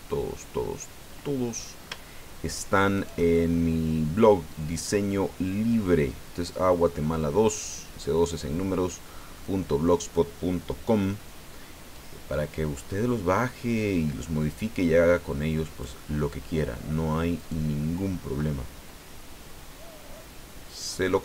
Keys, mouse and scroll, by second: 0.1-1.7 drag, 2.9 shift+right click, 3.3-8.3 shift+drag, 8.3-9.5 drag, 11.9 click, 12.7-13.2 scroll down 2, 13.4-13.7 scroll up 2, 13.7 scroll down 2, 13.7-14.5 scroll up 3, 14.5-15.1 scroll down 1, 15.1-17.3 scroll down 1, 17.4 right click, 17.8-21.2 middle drag.